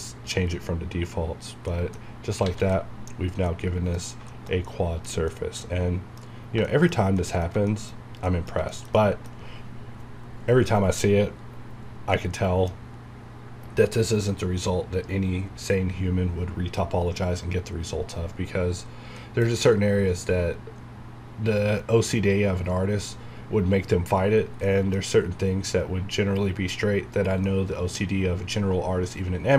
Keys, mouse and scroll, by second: 1.7 middle click, 2.0-2.4 scroll up 1, 2.7 middle click, 3.0 alt+a, 3.5 middle click, 4.2 scroll down 1, 4.3-6.7 shift+middle drag, 7.7 shift+middle click, 7.9 shift+scroll up 2, 8.3 middle click, 8.7 shift+middle click, 11.7 scroll down 1, 12.1 middle click, 12.8 scroll up 1, 17.8-18.5 scroll down 1, 19.2 middle click, 19.8 scroll up 1, 24.3 scroll down 1, 24.7 middle click, 25.0 scroll up 1, 27.0-27.5 scroll down 1, 27.5-29.5 middle drag.